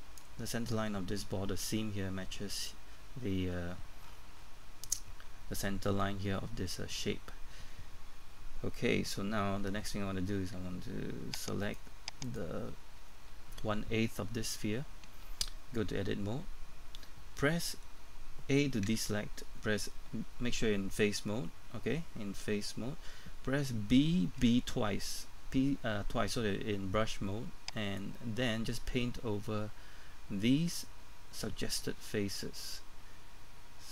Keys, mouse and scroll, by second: 4.0-8.9 scroll up 1, 11.6 right click, 13.0 scroll down 1, 13.3-15.3 scroll up 1, 15.9 Tab, 18.9 typing, 24.2-24.9 typing, 28.0-33.9 drag.